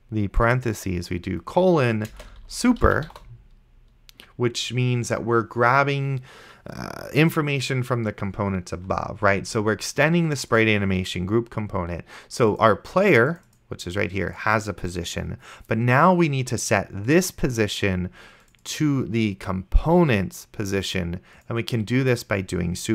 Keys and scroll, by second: 2.1-3.9 typing.